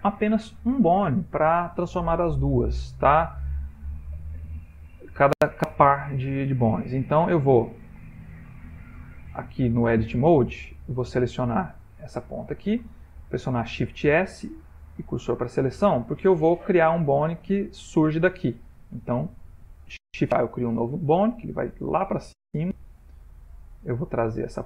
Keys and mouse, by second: 2.2 ctrl+middle click, 3.2 ctrl+middle click, 3.2 ctrl+middle click, 3.9 shift+middle click, 4.5 shift+middle click, 4.7 ctrl+middle click, 6.1 middle click, 10.0 Tab, 10.9 click, 12.2 middle click, 14.0 shift+s, 15.8 ctrl+middle click, 17.7 middle click, 19.8 shift+a, 20.6 ctrl+middle click, 21.1 ctrl+middle click, 22.5 g.